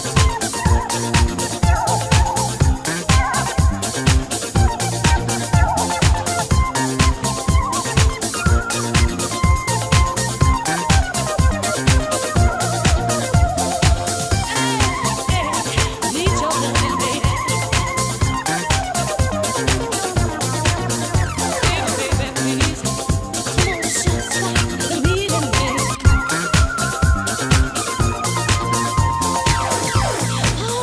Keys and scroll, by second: 25.7 space.